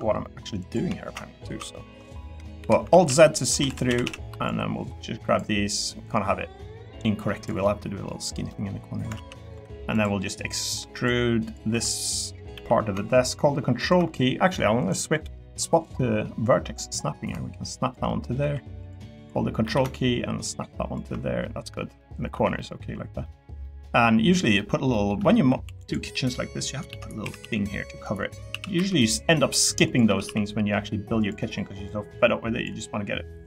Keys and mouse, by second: 0.7 ctrl+click, 2.6-4.3 typing, 2.9 alt+z, 6.0 click, 7.6 middle click, 8.5 middle click, 9.1 alt+z, 9.4 click, 10.0 click, 10.6 click, 10.9 click, 11.7 3, 11.9 click, 12.5 e, 13.8 ctrl+click, 15.2-16.3 drag, 18.1 middle click, 18.4 3, 19.1 click, 19.6 e, 21.5 middle click, 22.0 middle click, 22.3 Tab, 22.5 middle click, 23.2 middle click, 23.6 middle click, 24.6 middle click, 24.9 middle click, 25.6 3, 26.1 middle click, 26.9 shift+d, 27.2 s, 27.4 z, 28.5 s, 28.7 y, 30.0 s, 30.2 z.